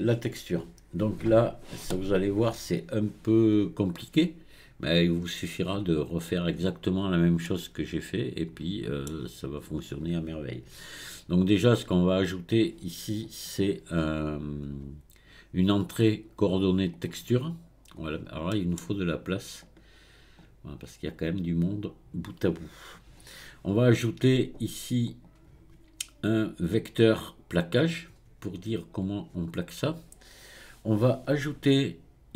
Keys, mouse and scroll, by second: 5.2-6.0 scroll up 2, 6.0 click, 7.4-10.5 middle drag, 13.2-16.3 drag, 18.5-19.6 middle drag, 19.6-21.2 drag, 25.1-28.2 drag.